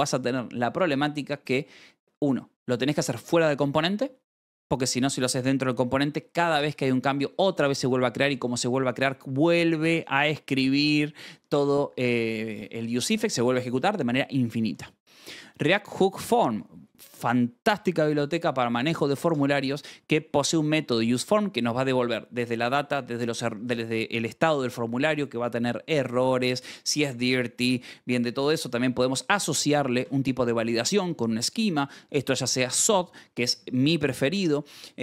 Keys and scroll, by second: 12.4 Escape, 15.3 j, 15.8 k, 19.7-21.4 typing, 29.6 j, 29.9 shift+v, 30.7 Escape, 32.2 j, 32.6 shift+v, 33.0 Escape.